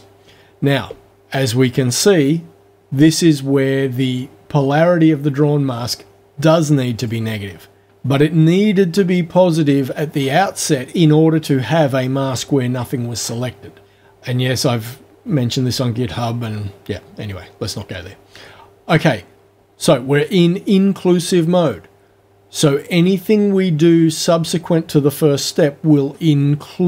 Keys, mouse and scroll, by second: 7.0 click.